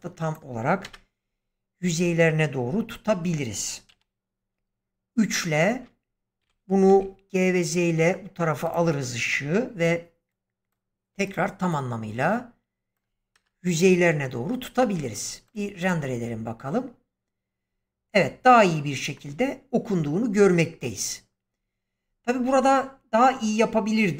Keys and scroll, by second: 0.7 0, 3.8 3, 6.3-6.8 typing, 13.2 0.